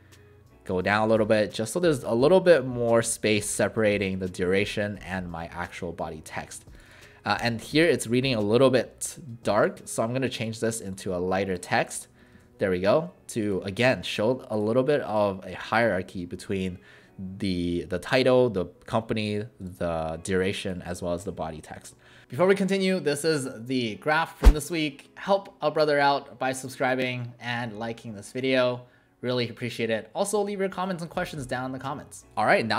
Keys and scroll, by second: 7.3 ctrl+a, 12.4 ctrl+a.